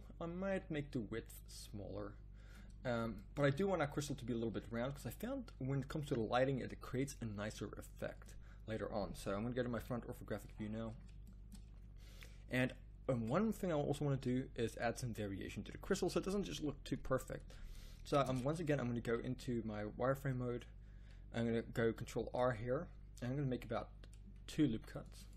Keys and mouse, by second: 9.7 KP_1, 18.3 Tab, 19.0 z, 20.4 z, 22.2 ctrl+r.